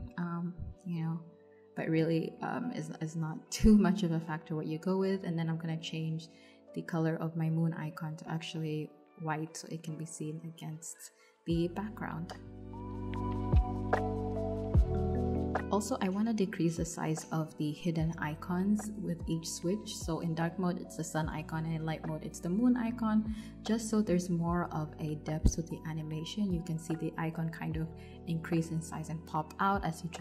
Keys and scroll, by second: 17.5 0, 26.1 0.